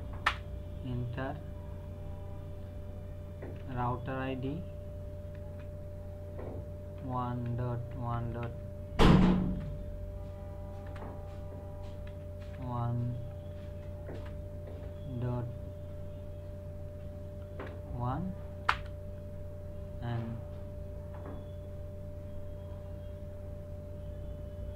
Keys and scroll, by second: 0.2 Return, 3.3-4.5 typing, 5.4 Tab, 7.0-9.4 typing, 10.8 BackSpace, 12.1 KP_Decimal, 12.4 KP_1, 12.6 KP_0, 14.1 BackSpace, 16.9 KP_Decimal, 17.5 KP_1, 18.7 Return.